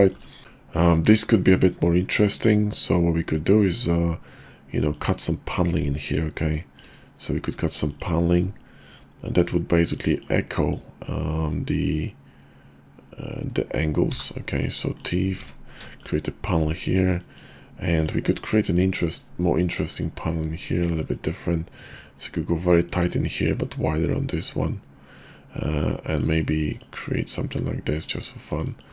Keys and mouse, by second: 0.0 shift+middle drag, 4.9-6.8 drag, 10.5-14.7 middle drag, 15.9 shift+middle click, 17.2 click, 18.7-21.3 drag.